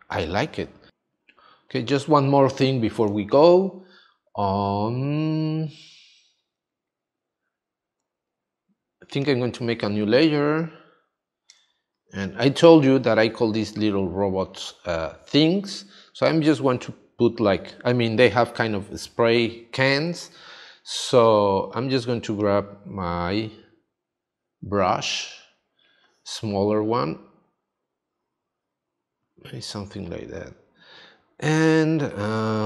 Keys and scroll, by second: 0.9 space, 11.6 space.